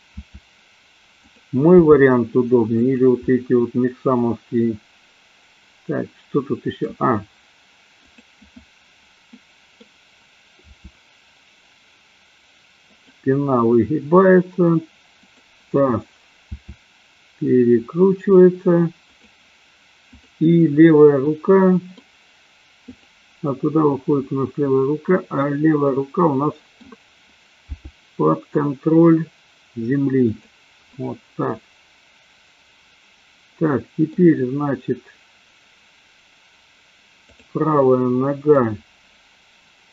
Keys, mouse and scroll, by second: 0.3 r, 1.8 g, 3.3-6.8 middle drag, 6.8 scroll up 1, 8.1 click, 9.3 middle click, 10.8 r, 13.0 click, 15.1 click, 16.5 r, 20.0 click, 21.3-22.1 middle drag, 25.4-26.9 middle drag, 27.9 g, 30.9-34.1 middle drag, 37.3 click, 38.5-39.9 middle drag.